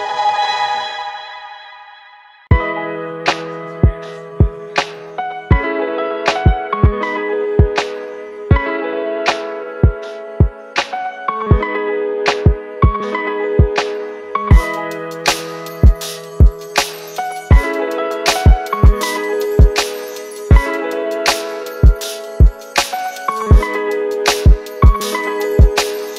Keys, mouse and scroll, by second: 4.4 typing.